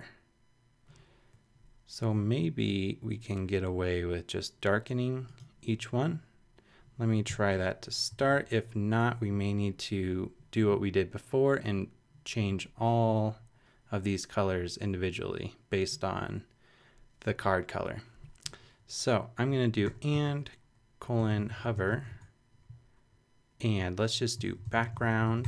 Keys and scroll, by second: 7.3 Return, 8.1 shift+Return, 8.2 shift+8, 8.9 shift+BackSpace, 19.8-22.2 typing, 22.6 shift+Return, 24.1-25.4 typing.